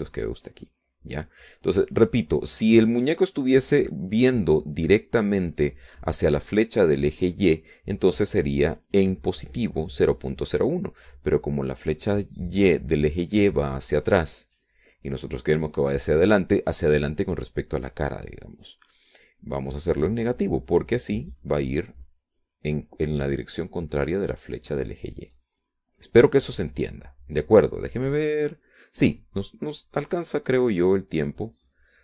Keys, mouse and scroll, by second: 19.9 middle click, 27.9 middle click, 28.5 scroll down 1, 29.0 middle click, 29.6-31.1 scroll up 2, 31.1 click, 31.8 click.